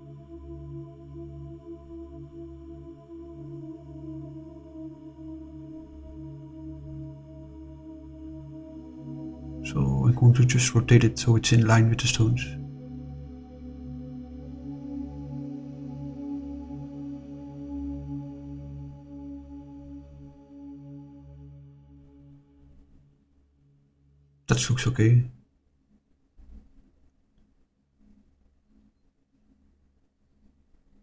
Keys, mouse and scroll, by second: 0.4 click, 1.2 click, 2.0 shift+click, 3.5 click, 4.5 scroll up 2, 7.0 click, 8.6 r, 14.4 click, 16.1 click, 16.7-19.3 drag, 22.2 click, 22.9 click, 23.9 click, 25.8-26.8 middle drag, 26.8-27.3 scroll down 1, 27.3-29.9 middle drag, 30.2 middle drag, 30.7-31.0 middle drag.